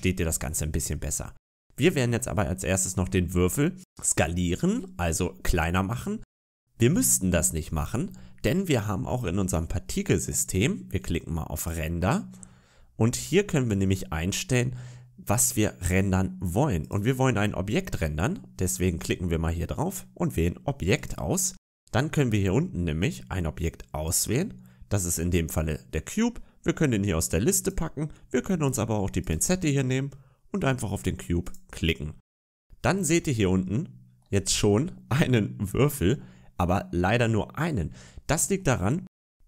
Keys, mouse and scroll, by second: 0.4-0.9 scroll down 3, 0.9-1.7 scroll up 1, 1.7 right click, 8.6 right click, 9.7-11.4 scroll down 4, 11.4 click, 12.3-13.4 scroll down 7, 13.4-14.6 scroll down 2, 16.7 click, 23.9 click, 29.1 click, 31.4 click, 32.7 scroll up 4, 33.3 shift+middle click, 34.3-36.3 scroll up 2, 36.8-37.6 scroll down 6, 37.9 shift+middle click, 38.9 middle click, 39.1 scroll down 2.